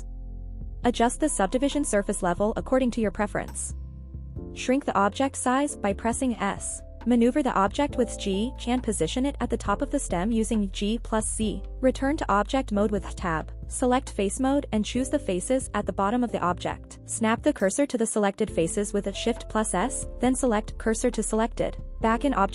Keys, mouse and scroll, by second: 1.2 click, 2.2 click, 2.9 click, 4.6-5.1 scroll up 1, 5.1 s, 7.5 click, 8.0 shift+middle click, 8.8 g, 9.0 z, 10.5 click, 10.8 scroll up 2, 11.2-11.5 shift+middle drag, 11.7-12.3 scroll up 2, 12.3 Tab, 12.6 shift+middle click, 15.4 click, 15.9 middle click, 16.6 click, 17.6 shift+s, 19.8 Tab.